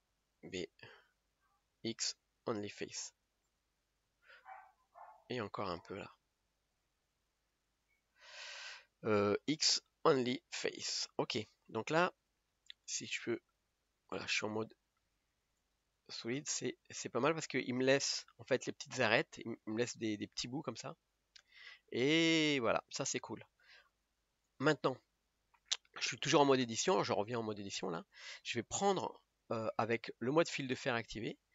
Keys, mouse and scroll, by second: 2.3 x, 7.6 b, 8.6 b, 11.4-12.3 scroll down 1, 12.3-13.7 middle drag, 13.7 Tab, 14.1 middle click, 14.5-15.6 scroll up 3, 15.6 click, 16.4-17.7 middle drag, 17.7-18.2 scroll up 5, 18.8-22.0 middle drag, 22.0-22.4 scroll down 5, 22.5-24.5 middle drag, 24.5 click, 25.4 KP_1, 28.4-31.5 drag.